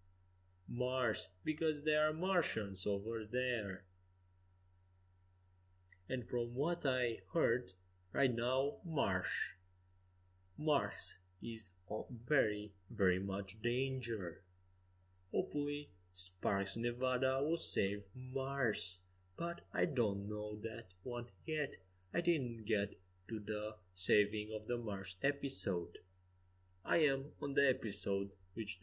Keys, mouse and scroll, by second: 0.6-3.3 drag, 7.3 s, 11.8 KP_0, 12.4 KP_0, 15.4-17.1 drag, 16.9 g, 20.4 s, 21.9 g, 26.3 g.